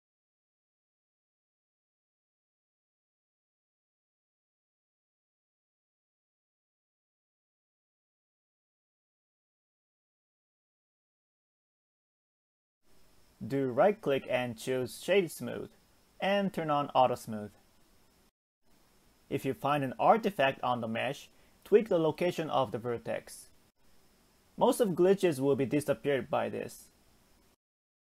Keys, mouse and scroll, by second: 1.6-2.3 scroll up 2, 2.3 shift+middle click, 3.2 click, 3.9 g, 4.9 click, 5.5 click, 6.2 g, 8.8-10.7 scroll down 4, 10.7 alt+z, 11.0-11.7 middle drag, 11.7 Tab, 12.3-13.1 middle drag, 13.1-16.0 right drag, 16.0 click, 17.0 click, 17.8-18.6 middle drag, 18.6-19.1 scroll up 3, 19.1 Tab, 20.1 g, 24.2 click, 24.7 click, 25.7 ctrl+click, 26.1 middle click, 27.0 ctrl+click, 27.6 middle click.